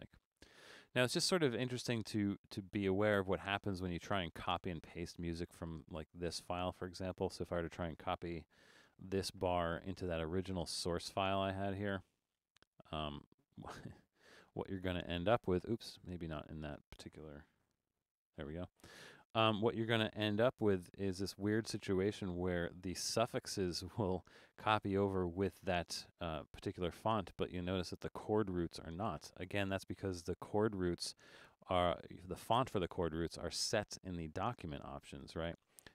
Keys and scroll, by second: 8.9 super+c, 13.3 super+v, 15.9 super+z, 17.8 super+v, 20.6 super+=.